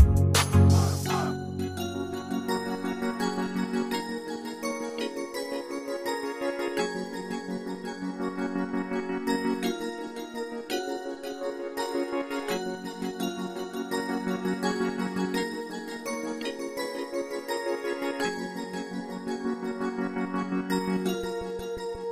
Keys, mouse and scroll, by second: 11.2-11.9 typing, 11.9 Return, 15.9 Caps_Lock, 17.2 typing.